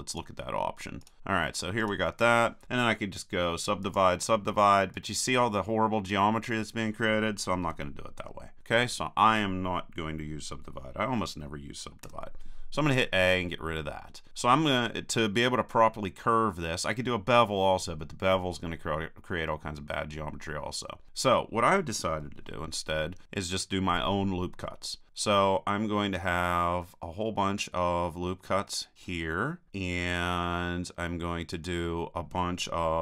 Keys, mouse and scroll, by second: 7.8 super+z, 8.2 super+z, 12.1 a, 23.4 ctrl+r.